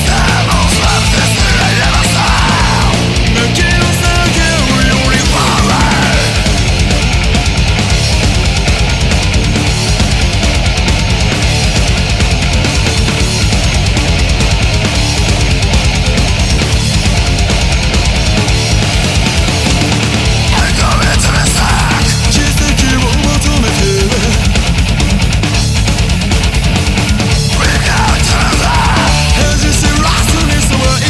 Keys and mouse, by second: 18.9 right click, 21.2 ctrl+z, 21.7 right click, 29.6 right click.